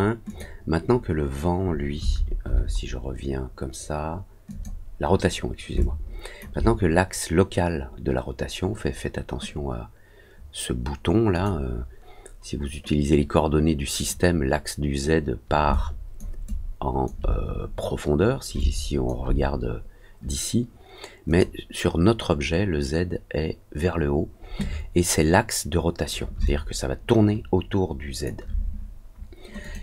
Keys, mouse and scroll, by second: 0.2 click, 4.4 click, 5.7 alt+click, 11.3 click, 15.7 alt+click, 16.4 alt+click, 18.5 alt+click, 21.2 click, 26.4-28.2 alt+drag, 29.6 click.